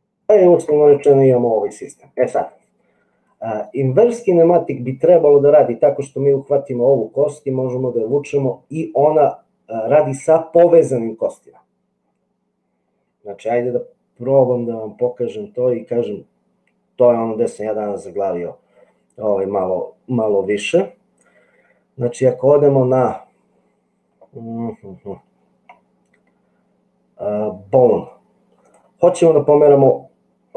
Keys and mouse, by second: 0.2 middle click.